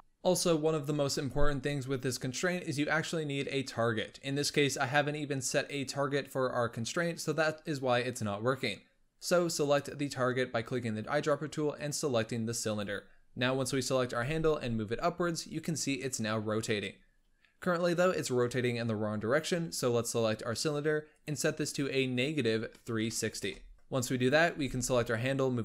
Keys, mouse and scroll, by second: 9.6 click, 12.5 click, 14.0 g, 19.2 click, 21.0-23.7 drag, 23.7 g, 24.3 g.